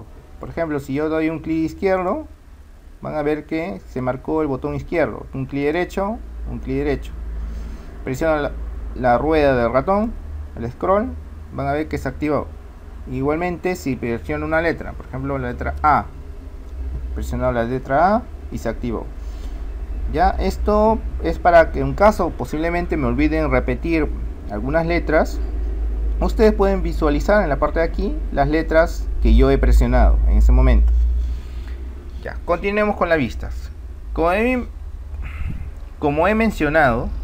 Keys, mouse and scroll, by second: 2.2-4.1 drag, 5.8-7.6 right drag, 10.3-12.1 middle drag, 15.9 a.